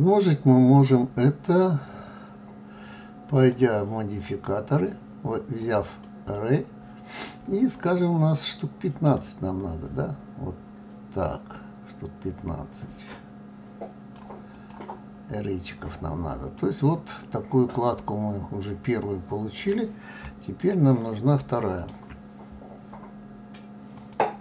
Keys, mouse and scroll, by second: 3.3 click, 4.2 click, 8.5 click, 14.5 click, 15.0-15.7 scroll down 3, 15.7-16.5 scroll up 1, 16.5-19.5 middle drag, 20.6-23.6 shift+middle drag.